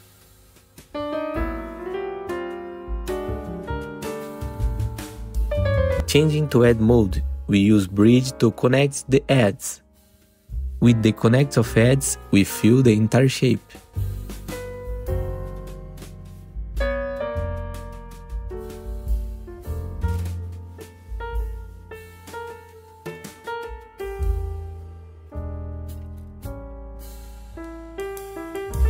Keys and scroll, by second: 2.1 F3, 5.7 F3, 5.9 2, 9.9 ctrl+b, 10.5 Return, 11.4 2, 12.1 w, 14.3 ctrl+b, 14.7 Return, 17.5 ctrl+z, 18.2 ctrl+b, 18.7 Return, 24.1 ctrl+r, 28.3 ctrl+z.